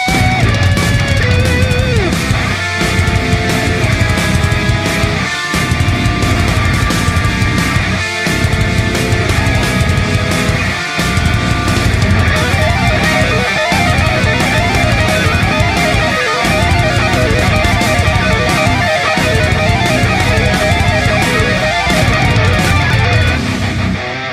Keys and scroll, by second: 1.3-2.1 space.